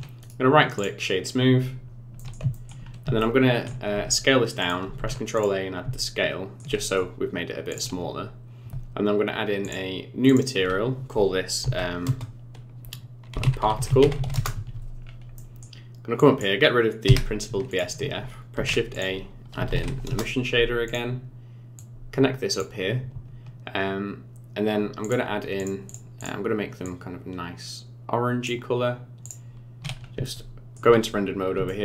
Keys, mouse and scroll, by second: 0.2 right click, 1.3-2.0 scroll down 10, 2.2 middle click, 2.5 shift+middle click, 2.9 scroll up 4, 3.2 shift+middle click, 3.9 s, 5.0 ctrl+a, 6.0 shift+middle click, 6.8 middle click, 7.7 click, 9.6 click, 10.3 click, 15.1-15.4 scroll down 3, 15.4 middle click, 16.2 click, 17.1 Delete, 17.7 click, 18.6 shift+a, 21.8 click, 25.0 click, 26.2 click, 29.3 click, 30.0 scroll up 3, 30.2 shift+middle click, 31.2-31.5 scroll up 4, 31.7 shift+middle click.